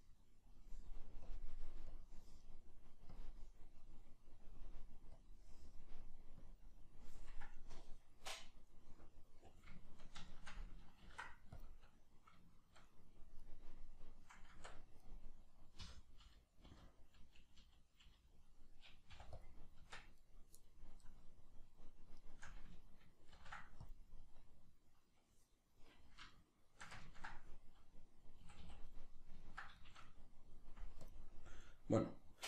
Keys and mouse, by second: 9.3 right click, 10.3 shift+right click, 11.0 ctrl+l, 12.6-13.4 shift+middle drag, 13.4 right click, 14.5 Tab, 15.0 right click, 15.8 l, 20.2 right click, 22.2 shift+right click, 23.4 ctrl+l, 26.4-31.0 shift+middle drag, 28.5 a, 31.0-31.6 drag, 31.6-32.4 middle drag.